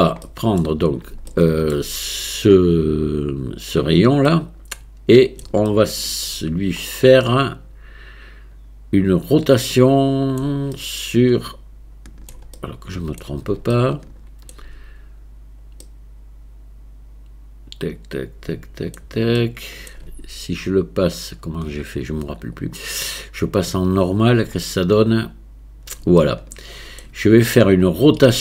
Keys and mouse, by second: 0.3 middle click, 1.3-1.8 shift+middle drag, 3.7 click, 4.3-5.4 middle drag, 5.7-6.3 shift+middle drag, 7.0-10.4 middle drag, 10.8-12.3 shift+middle drag, 12.6-13.2 middle drag, 13.8 shift+middle click, 16.0-19.0 middle drag, 19.4 shift+middle click, 23.2-24.6 drag, 24.7-27.0 middle drag.